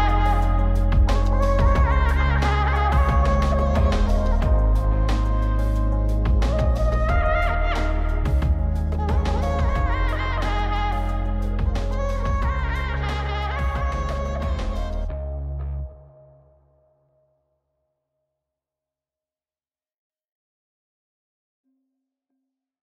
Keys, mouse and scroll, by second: 13.3 click, 14.2 click, 15.4 click, 16.9-17.8 middle drag, 18.6-21.1 drag, 21.5 click, 22.1 click.